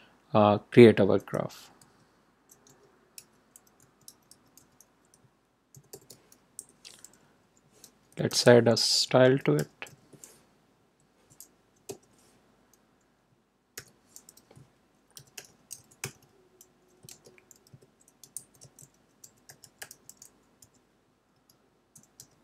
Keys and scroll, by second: 1.7-6.3 typing, 6.5 Left, 8.2-10.5 typing, 10.7 Right, 11.8 ,, 13.7 shift+", 14.8-22.4 typing.